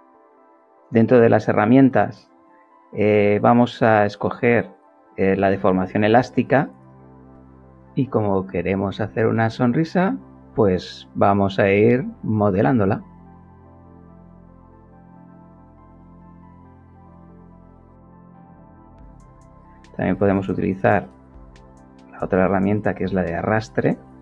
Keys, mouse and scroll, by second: 4.2 click, 11.5-13.0 drag, 15.4-17.0 drag, 19.3 click, 20.5 click.